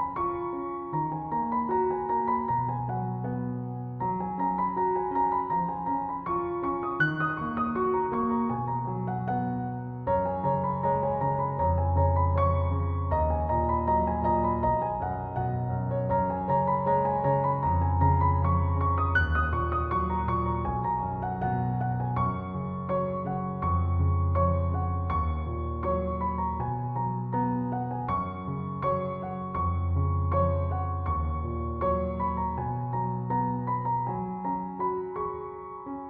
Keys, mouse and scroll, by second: 9.4 click, 11.9-17.7 drag, 17.7-20.5 drag, 22.9 click, 27.5-36.0 drag.